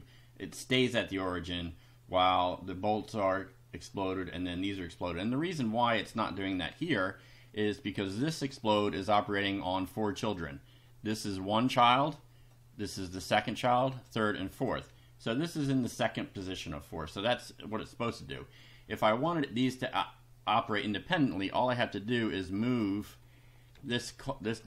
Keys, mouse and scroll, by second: 8.2 click, 10.4-11.9 drag, 12.5 click, 14.0 click, 14.5 click, 19.3 click, 21.4-23.0 drag, 23.8 ctrl+x, 24.5 click.